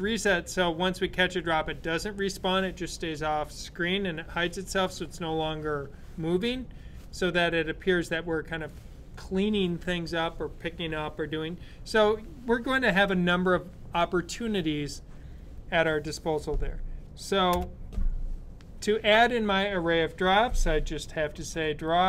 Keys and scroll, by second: 20.9-22.0 typing.